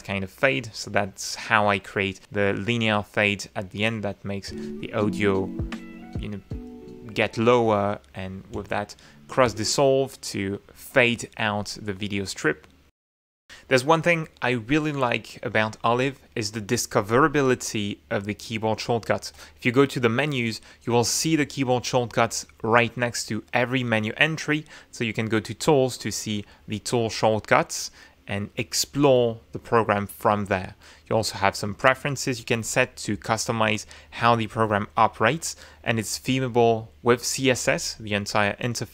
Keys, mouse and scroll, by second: 0.1 click, 4.2 click, 4.8 space, 8.8 space, 9.8 space, 10.0 scroll up 1, 10.1 click, 12.1-12.7 scroll up 2, 13.3 click, 19.0-24.6 drag, 35.5 click.